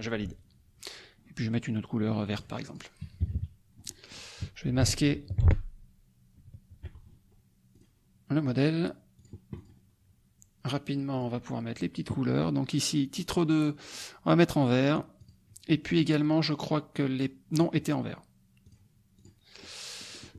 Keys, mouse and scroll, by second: 2.4 click, 2.6 click, 3.2 KP_Subtract, 3.8 middle click, 7.7 click, 9.1 click, 9.5 click, 11.1 click, 13.1 click, 15.2 click, 18.6 click, 19.1 click, 19.6 click.